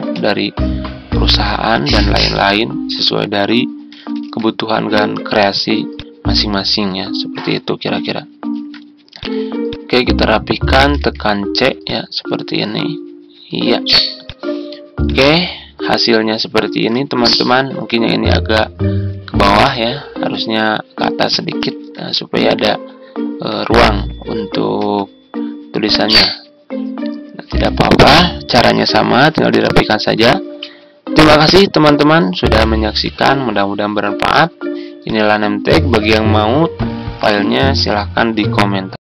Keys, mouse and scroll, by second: 0.0 c, 1.3 ctrl+z, 4.1 ctrl+g, 8.4 ctrl+g, 10.9 c, 13.4 c, 16.6 ctrl+g, 21.6 ctrl+g, 24.7 shift+t, 31.2 Delete, 32.4 z.